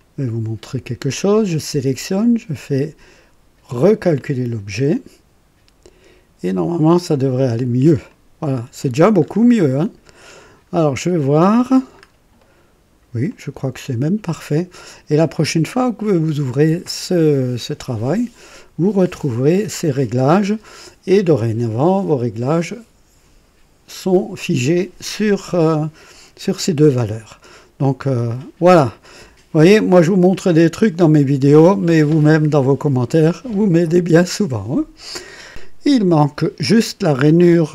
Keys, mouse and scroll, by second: 0.0 click, 1.9 right click, 4.2 click, 7.1 click, 8.1-9.1 drag, 9.3 scroll up 2, 9.7 right click, 10.4-11.8 drag, 12.0-12.3 scroll up 2, 12.4-13.1 right drag, 13.3-15.4 drag, 15.5-15.8 scroll down 1, 16.1-18.1 drag, 18.5-20.5 drag, 27.4-28.2 drag, 30.3-31.8 drag, 36.2-37.0 drag.